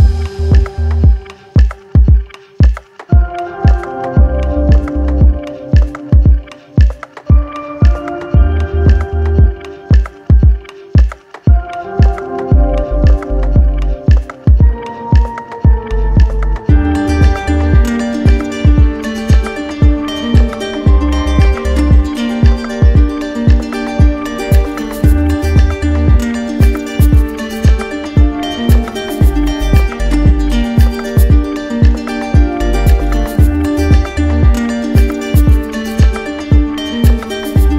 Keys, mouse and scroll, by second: 1.3 w, 7.1 ctrl+click, 8.8 click, 11.5 click, 13.7 click, 15.7 ctrl+click, 15.8 ctrl+z, 16.9 right click, 17.5 alt+right click, 17.9 ctrl+click, 20.1 ctrl+click, 33.6 click, 35.3 right click, 36.8 right click, 37.4 shift+right click.